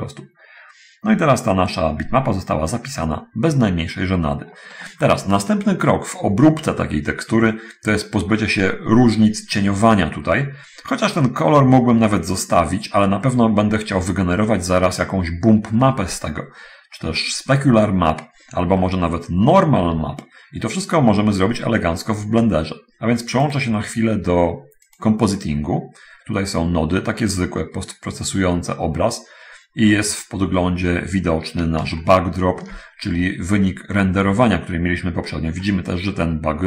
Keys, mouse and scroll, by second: 19.0 middle click, 20.0 t, 20.8 scroll up 1, 21.4 middle click, 23.7 click, 25.2 click, 25.9-26.7 scroll down 1, 27.4-29.0 middle drag, 32.0-33.0 ctrl+shift+middle drag, 35.8-36.6 middle drag.